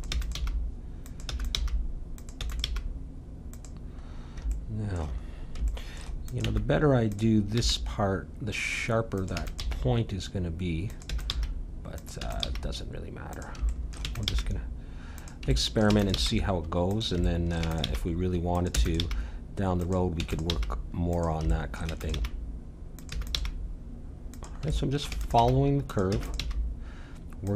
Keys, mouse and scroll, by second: 0.1-2.6 typing, 4.0 middle click, 6.2-8.6 drag, 6.4 e, 7.5 g, 9.3 e, 9.6 g, 11.1 e, 11.3 g, 12.2 e, 12.4 g, 13.7 middle click, 14.0 e, 14.3 g, 15.9 e, 16.2 g, 17.6 e, 17.8 g, 18.7 e, 19.0 g, 20.1-23.3 typing, 24.7-26.1 middle drag, 25.1 e, 25.4 g, 26.1 e, 26.4 g.